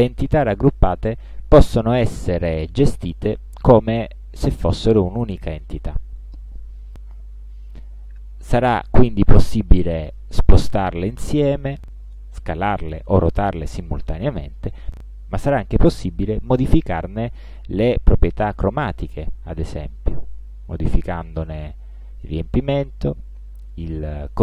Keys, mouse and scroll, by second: 5.1 click, 7.0-8.7 drag, 10.2-12.0 drag, 12.9-15.0 drag, 18.8 click, 21.5 shift+click.